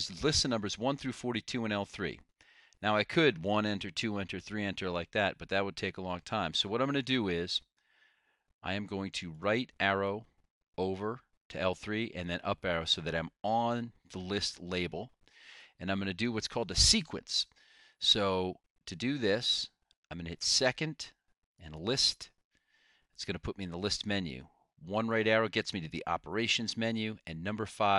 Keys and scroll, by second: 9.5 Right, 10.2 Right, 12.4 Up, 25.3 ).